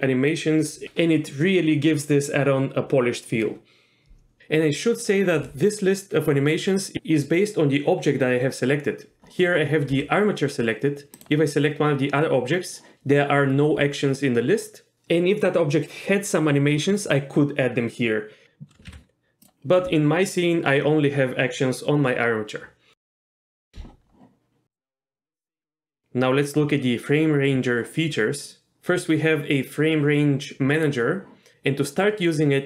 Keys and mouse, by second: 11.3 click, 19.5 ctrl+z, 19.5-20.6 drag, 30.9 click.